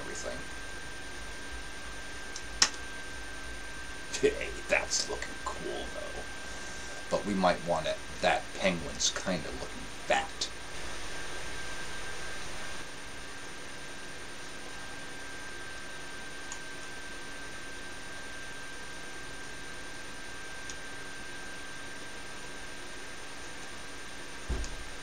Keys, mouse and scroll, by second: 0.6-2.5 drag, 2.6 KP_0, 12.6 KP_0, 14.6 KP_0, 17.0-18.7 middle drag, 22.4-24.0 drag.